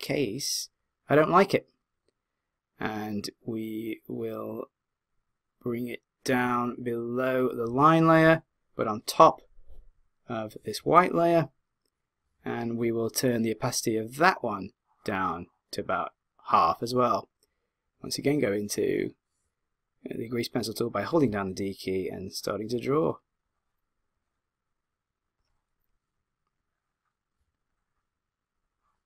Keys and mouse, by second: 0.5-2.2 drag, 7.0 click, 8.6 click, 14.7 click, 21.2 d, 21.7 click.